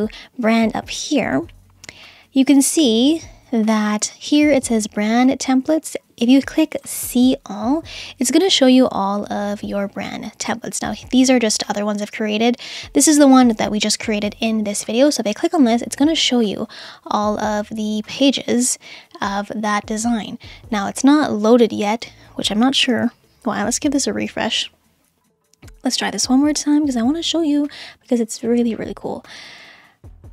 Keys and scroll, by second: 23.0 super+r.